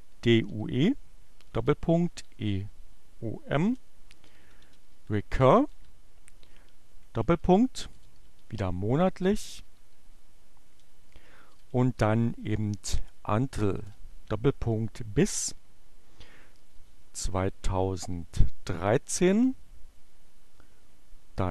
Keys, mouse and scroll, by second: 0.0-5.8 typing, 7.3-9.5 typing, 11.1-13.8 typing, 15.2-16.0 typing, 17.5-18.4 typing, 20.5 2.